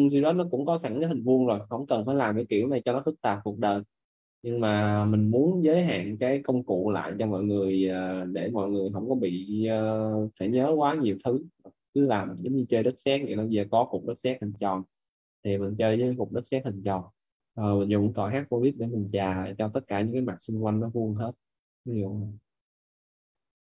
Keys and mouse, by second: 1.3 right click, 3.5 click, 7.7 right click, 9.8 click, 14.5 right click, 15.9 click, 21.1 right click, 21.9 click.